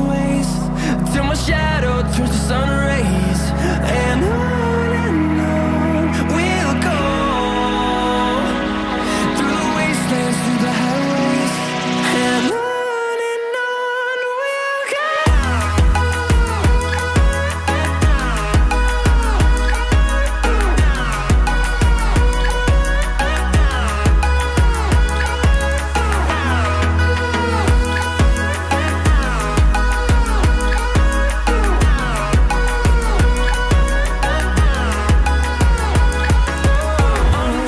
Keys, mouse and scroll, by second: 1.1 scroll down 1, 1.3 Escape, 1.6 scroll up 5, 2.1 scroll down 1, 2.4 middle click, 2.9-3.4 scroll up 1, 5.1 double click, 20.8-21.4 scroll up 5, 22.3-23.6 scroll up 5, 26.4 typing, 28.9 BackSpace, 29.1 BackSpace, 29.8 9, 30.6 Return, 31.6 middle click, 35.1 2, 35.2 Return, 35.7 scroll down 1, 35.9 middle click.